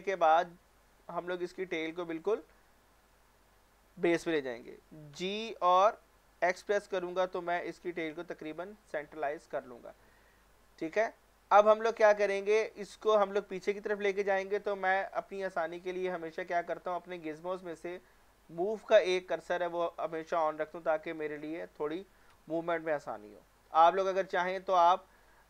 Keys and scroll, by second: 5.1 g, 5.7 y, 6.6 x.